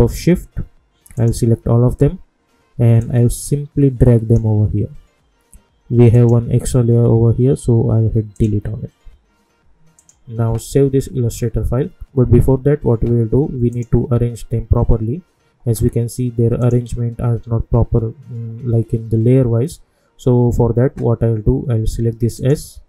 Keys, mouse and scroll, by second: 3.3-4.5 drag, 8.3 click, 13.7 click, 16.6 click, 22.3-22.8 drag.